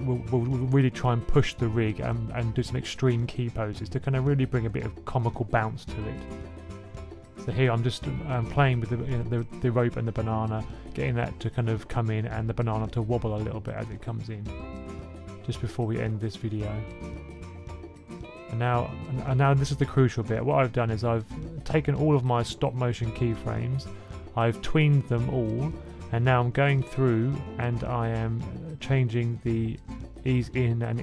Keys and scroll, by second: 9.7 super+s, 12.7-13.2 typing.